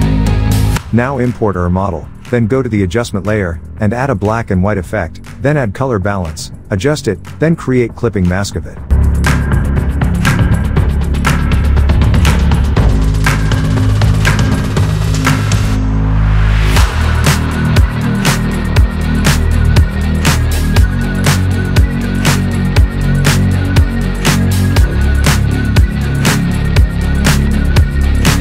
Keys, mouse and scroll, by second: 0.4-0.9 alt+Tab, 2.0-7.4 drag, 10.6 alt+click, 14.4-16.9 drag.